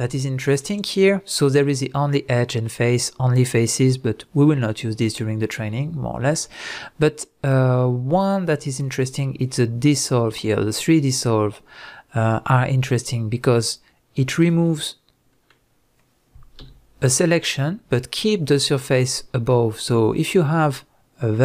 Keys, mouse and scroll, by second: 14.4 click, 14.8-21.4 middle drag, 16.6 x.